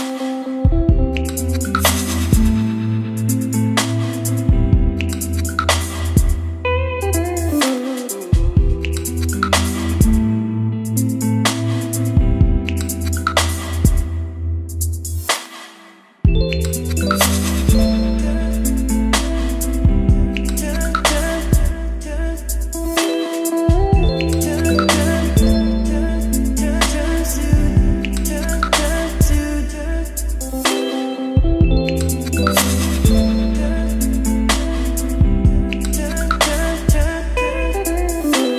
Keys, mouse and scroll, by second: 11.6-13.8 middle drag, 13.8-15.9 drag, 15.6-16.8 typing, 17.4 Return, 28.9-33.6 drag, 33.6 Return, 35.9 space, 37.0-38.5 typing.